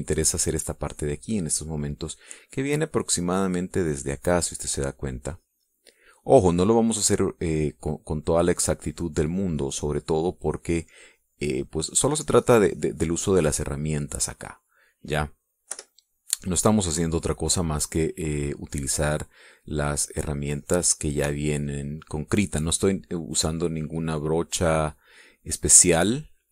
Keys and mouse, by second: 5.1-8.1 drag, 8.3-12.8 drag, 12.9-14.4 drag, 14.5-16.1 drag, 16.1 middle click, 16.7 KP_Subtract, 17.0 click, 18.1 click, 18.7 click, 19.3 click, 20.4-24.0 drag, 24.5-26.5 drag.